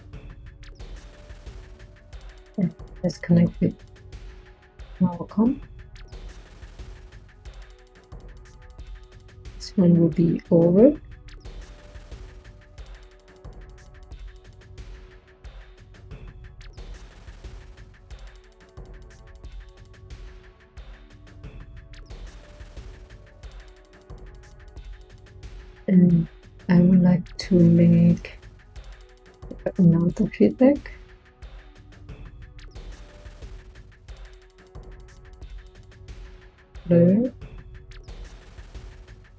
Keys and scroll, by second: 27.5 Tab, 29.3-30.5 typing, 36.0 Tab.